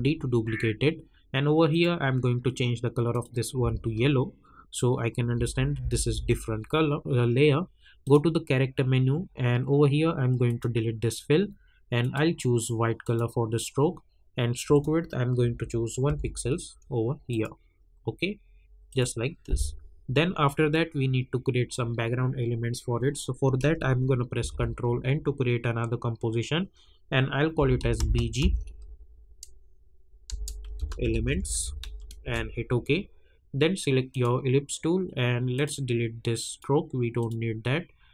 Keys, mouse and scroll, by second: 1.7 click, 3.6 space, 8.0 click, 10.4 click, 16.0 Return, 17.3 click, 24.4 ctrl+n, 27.3-28.3 typing, 30.4-32.3 typing, 34.1-38.1 drag.